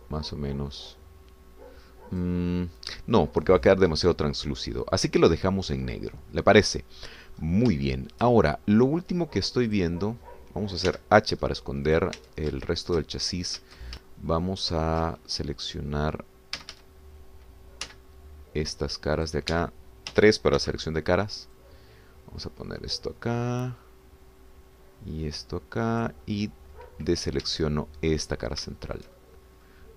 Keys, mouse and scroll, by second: 5.0-5.4 scroll down 2, 5.7 scroll up 2, 6.2-6.9 scroll down 4, 6.9-8.3 drag, 8.4-8.8 scroll up 3, 8.9 shift+click, 9.5-9.9 shift+scroll up 3, 10.2 scroll down 2, 10.7 click, 11.9 h, 12.4 scroll up 2, 13.1 click, 13.3 Tab, 13.6 shift+click, 13.7-14.6 shift+scroll up 6, 15.3 shift+middle click, 16.7-17.0 scroll down 2, 17.6 a, 18.9 c, 19.9 click, 20.5 Escape, 21.1 3, 21.6 c, 22.6-27.3 drag, 28.1 middle click, 28.3 click, 28.4 Escape, 28.8 scroll down 1, 29.0-29.9 drag.